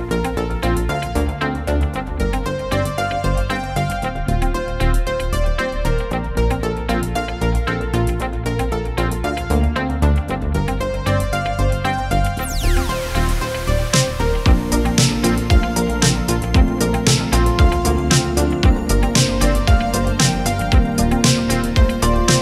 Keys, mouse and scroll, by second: 0.0-0.5 typing, 5.7 Return, 6.2 typing, 6.5 Return, 9.8 Return, 12.4-16.9 typing, 17.2 Return, 21.8 click.